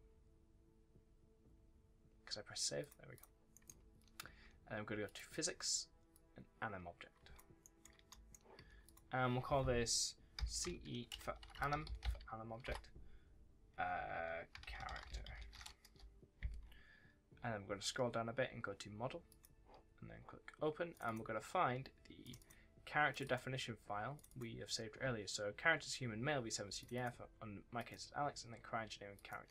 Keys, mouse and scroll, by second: 2.7 ctrl+s, 3.4 right click, 3.7 w, 4.9 click, 5.3-6.0 scroll down 1, 6.0 click, 7.7 1, 8.0 right click, 8.5 s, 8.7 click, 10.3 c, 10.5 e, 11.0 BackSpace, 11.6 a, 14.4 c, 15.4 r, 15.7 Return, 16.6-17.2 scroll down 1, 17.2 scroll up 1, 17.5-17.9 scroll down 1, 19.2 click.